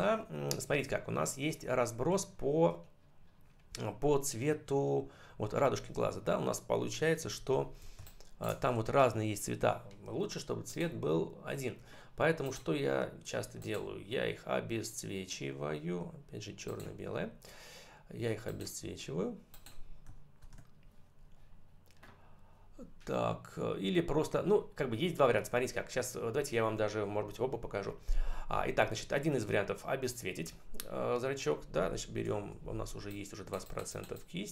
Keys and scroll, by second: 7.2 ctrl+=, 7.8 space, 20.3 ctrl+BackSpace.